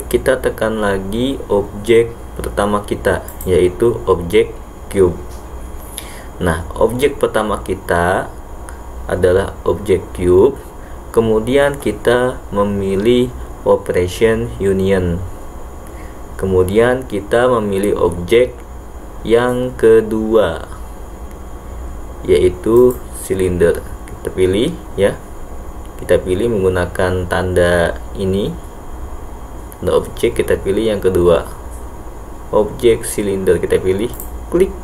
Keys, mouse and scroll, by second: 3.3 click, 22.8 click.